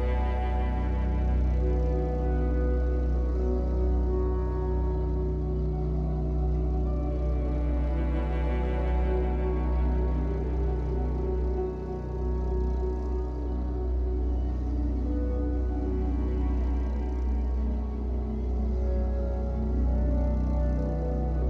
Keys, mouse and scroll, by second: 1.0 click, 1.3-4.0 middle drag, 4.8 KP_1, 6.3-8.9 middle drag, 9.1 KP_1, 10.3 e, 12.3 click, 12.5-13.6 middle drag, 13.6 click, 14.2 KP_1, 14.9 b, 17.2 click, 17.4-18.9 middle drag, 17.8-18.9 scroll up 2, 18.9 click, 19.6-20.9 middle drag, 20.9 shift+click.